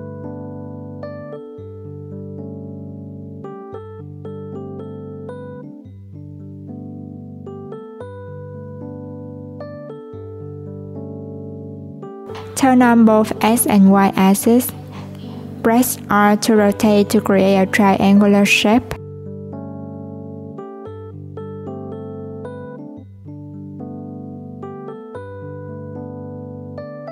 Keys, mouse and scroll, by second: 1.2 click, 2.6-3.7 drag, 4.3 /, 5.4 click, 6.5 click, 8.2-10.7 drag, 14.1 click, 23.4 click.